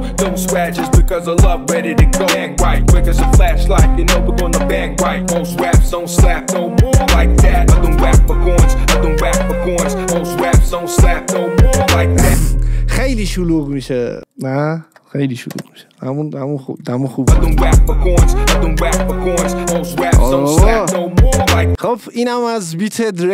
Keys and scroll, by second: 1.9 ctrl+d, 12.2 space, 12.6 ctrl+z, 15.7 0, 17.2 space.